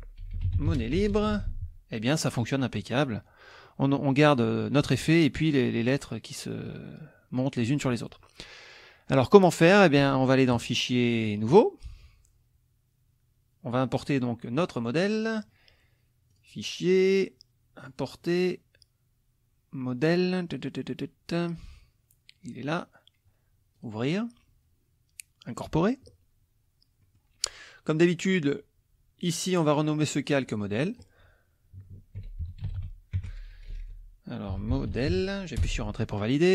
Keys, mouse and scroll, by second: 0.0-1.8 typing, 10.5 click, 11.5 click, 15.2 click, 16.3 click, 17.8 click, 21.7 click, 23.8 click, 25.5 click, 27.0 middle click, 30.1 click, 30.8 click, 31.9-35.6 typing, 35.6 Return.